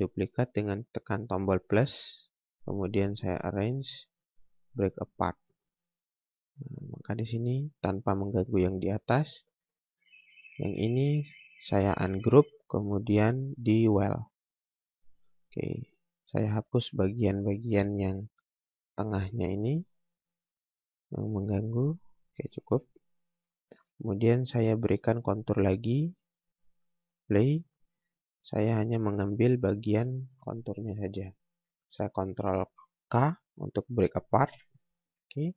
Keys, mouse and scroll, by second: 3.0 click, 9.5 scroll down 1, 9.7 scroll up 1, 10.5 click, 16.2 scroll up 1, 16.8 click, 18.3 Delete, 18.5 click, 19.3 Delete, 20.0 click, 20.9 Delete, 21.3 scroll down 1, 22.6 space, 26.8 click, 29.7 click.